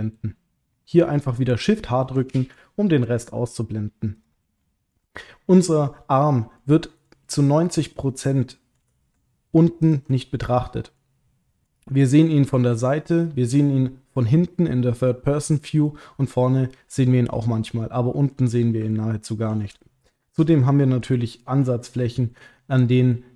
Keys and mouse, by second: 2.3 shift+h, 4.6 shift+middle click, 5.2 middle click, 6.5 middle click, 7.9 click, 8.3 middle click, 9.8 ctrl+click, 10.3 middle click, 11.6 middle click, 13.0-15.9 middle drag, 17.4-18.6 middle drag, 18.9 ctrl+middle click, 19.9 shift+middle click, 20.6 ctrl+middle click, 21.8 middle click.